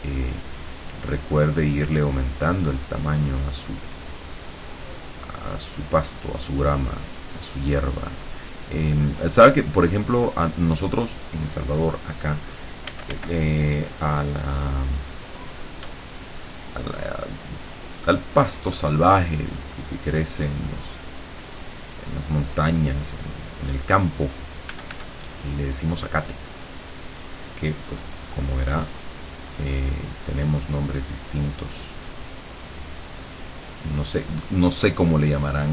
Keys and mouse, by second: 4.0 click, 4.6-6.0 drag, 6.6-12.4 drag, 12.9 f, 13.5-17.5 drag, 18.1-19.2 drag, 19.4-23.5 drag, 23.8 click, 24.7 f, 25.4-35.7 drag.